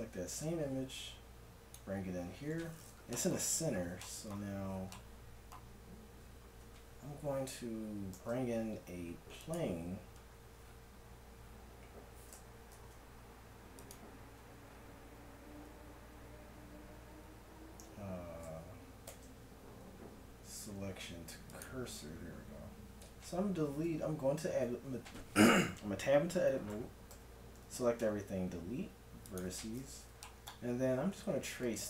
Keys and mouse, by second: 8.2 shift+a, 12.7 shift+s, 19.1 shift+s, 22.3-23.7 middle drag, 23.7 Tab, 26.7 a, 27.1 a, 28.0 x.